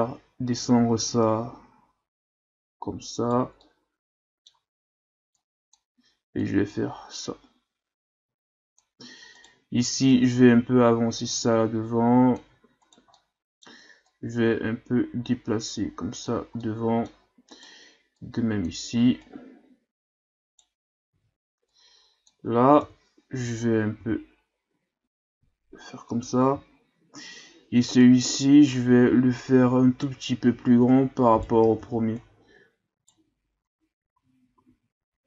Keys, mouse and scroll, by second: 3.6-5.3 middle drag, 5.3-9.4 drag, 9.4 right click, 10.1-12.8 drag, 12.8 right click, 13.1 middle click, 14.0-16.6 drag, 16.6 middle click, 17.5 right click, 18.2-19.2 drag, 19.2 right click, 21.1 ctrl+z, 21.6-22.8 drag, 22.8 KP_3, 24.0 g, 26.6-27.6 shift+scroll up 5, 28.0 right click, 30.9 right click, 31.8 ctrl+z, 32.2 right click, 33.8 Tab, 34.2 a, 34.6 a.